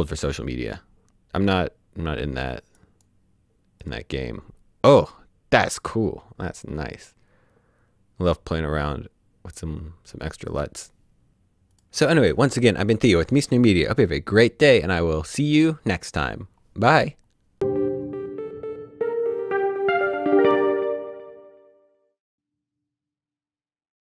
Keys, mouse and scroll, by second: 2.8 click, 7.0 click.